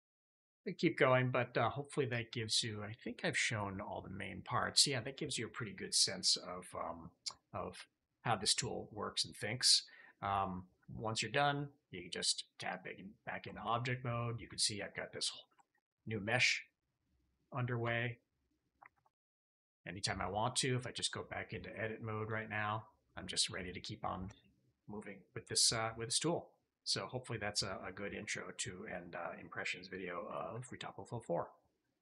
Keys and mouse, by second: 0.1 shift+click, 0.8 click, 8.6-9.9 drag, 12.1 Tab, 13.4 shift+drag, 13.6 drag, 14.8 click, 15.5 shift+middle drag, 15.7-16.5 middle drag, 17.1 drag, 17.1 middle drag, 17.7 Tab, 19.5 KP_Divide, 19.9 drag, 19.9 middle drag, 20.9 Tab.